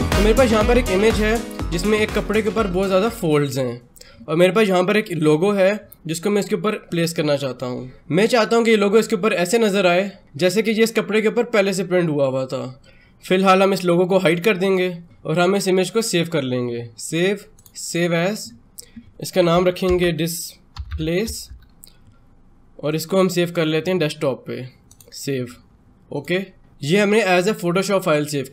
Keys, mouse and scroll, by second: 5.0 click, 14.4 click, 15.9 click, 19.1-21.8 typing, 22.7 click.